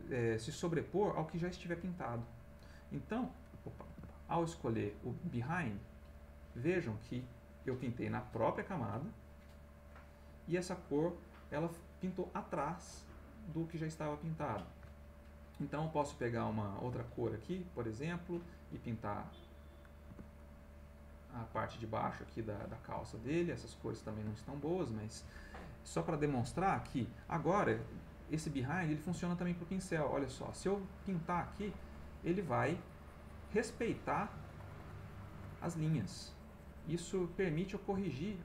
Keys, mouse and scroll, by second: 1.8 click, 3.9 ctrl+z, 4.4 ctrl+click, 5.2 click, 6.1 click, 7.3 middle click, 8.5 click, 9.7 click, 10.1 click, 13.0-14.4 middle drag, 14.5 ctrl+middle click, 15.7 middle click, 18.1 ctrl+click, 18.9 click, 20.3 ctrl+click, 20.8 ctrl+middle click, 21.6-25.1 ctrl+middle drag, 25.7 middle click, 29.1 b, 30.5-38.0 drag.